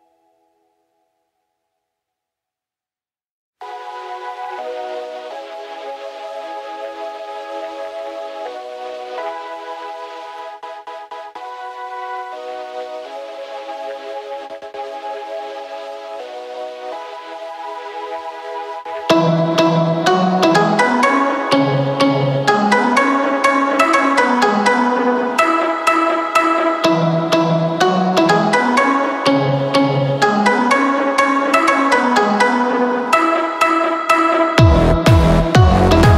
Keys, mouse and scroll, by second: 0.0 scroll down 1, 0.2 middle click, 0.6-1.3 scroll up 5, 1.3-1.7 scroll down 3, 2.4 click, 3.8 click, 5.9 click, 9.3 click.